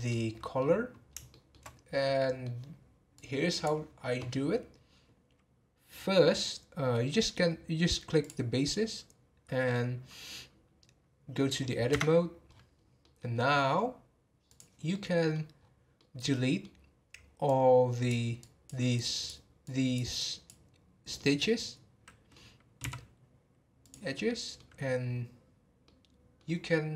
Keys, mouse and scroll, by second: 0.1 middle click, 0.9 scroll up 1, 1.3 shift+middle click, 1.7 scroll up 2, 2.0-3.2 middle drag, 3.2-6.3 drag, 8.2 click, 11.9 Tab, 12.5-12.8 scroll down 8, 13.0 middle click, 13.3-13.8 scroll up 5, 14.5 click, 14.9 middle click, 15.6 scroll up 4, 16.0-17.4 middle drag, 17.4 click, 18.4 click, 19.6 click, 20.1 click, 21.1-22.8 middle drag, 22.8 x, 24.3 middle click, 25.0-25.6 scroll down 5, 25.8-26.9 middle drag.